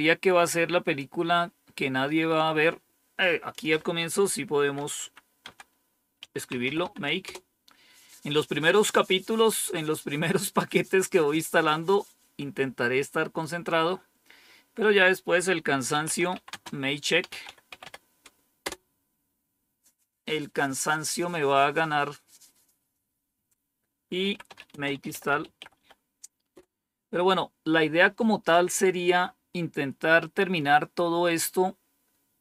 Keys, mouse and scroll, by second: 3.4 click, 4.9 Up, 5.3 Down, 5.8-7.2 typing, 15.6-18.2 typing, 18.5 Return, 20.4 typing, 23.9-26.4 typing.